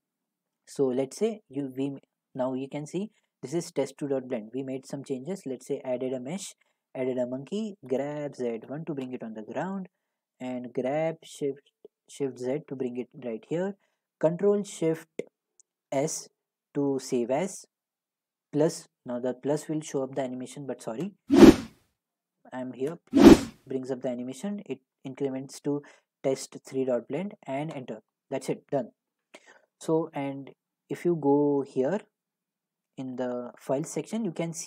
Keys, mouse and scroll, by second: 0.3 click, 4.6 a, 6.9 click, 7.9-9.1 typing, 10.6-12.4 typing, 12.7 click, 15.9 ctrl+shift+s, 22.4 click, 23.7 click, 27.7 Return, 31.7 click, 33.2 click, 33.9 click.